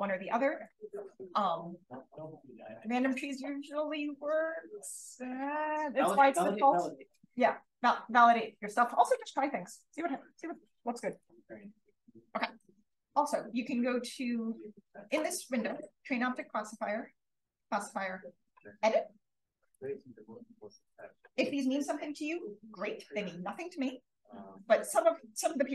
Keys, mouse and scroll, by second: 11.0 click, 15.1-18.3 drag, 19.6 click.